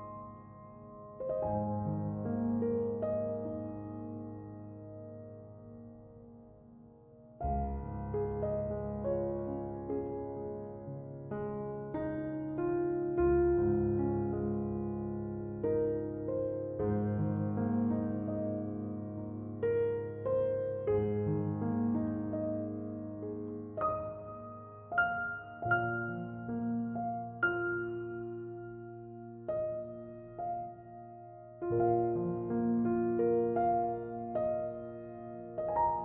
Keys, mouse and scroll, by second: 9.9 1, 10.3 Return.